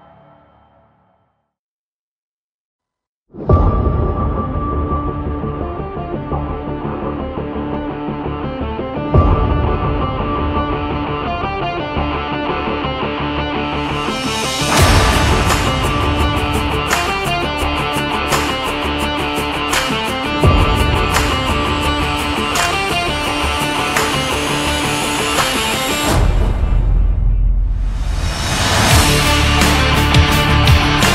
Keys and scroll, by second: 2.5 shift+x, 16.4 ctrl+-.